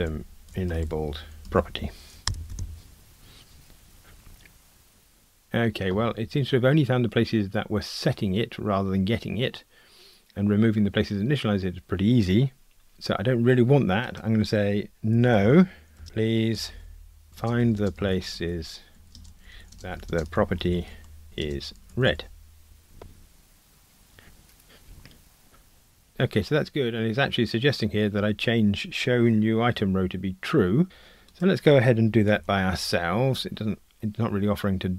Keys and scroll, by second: 32.4 super+b.